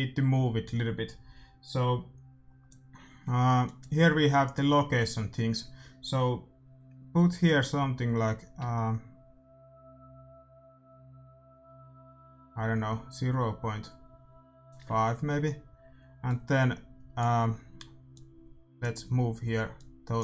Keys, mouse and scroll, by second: 3.6-5.3 drag, 7.5-9.3 drag, 16.2-20.2 drag.